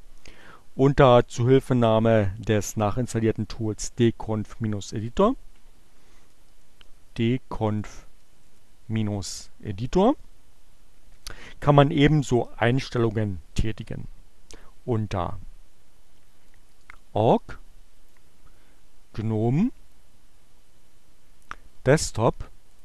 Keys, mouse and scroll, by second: 3.2-5.5 drag, 5.7-8.9 typing, 11.0 Return, 16.5 click, 17.9 click, 19.9-21.8 drag, 22.2 click.